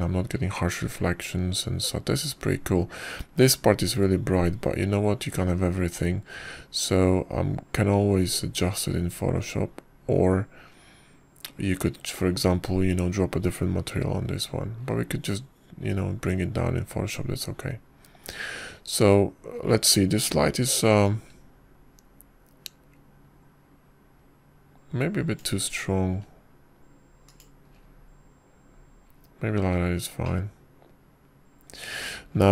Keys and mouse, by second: 22.9-27.3 drag, 28.0 s, 32.1-32.5 middle drag.